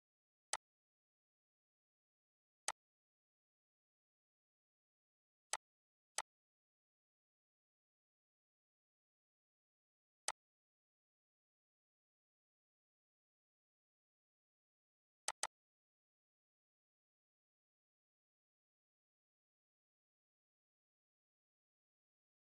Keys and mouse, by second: 2.3-5.1 drag, 5.1 click, 9.9-14.9 drag, 14.9 click, 18.4 Tab.